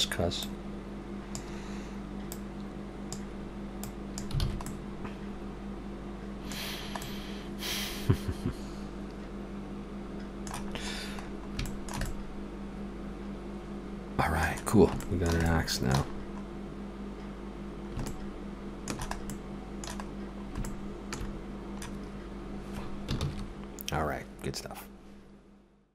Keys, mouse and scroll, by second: 0.5 click, 2.3 click, 4.5 alt+a, 4.6 middle click, 6.7 scroll down 2, 7.0 middle click, 10.8 scroll up 2, 11.3 scroll down 1, 11.7 shift+middle click, 12.1 middle click, 15.0 shift+middle click, 16.2-16.5 scroll up 3, 17.6 scroll down 1, 18.1 shift+middle click, 19.3 middle click, 20.2 scroll up 1, 20.6 shift+middle click, 23.3 ctrl+s.